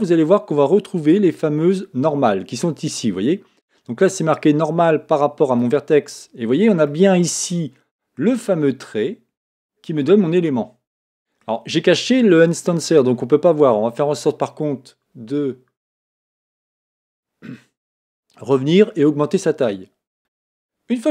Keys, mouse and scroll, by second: 6.8-9.8 middle drag, 10.0-14.4 middle drag, 14.4 scroll up 1, 16.7-19.7 drag, 20.2 Tab.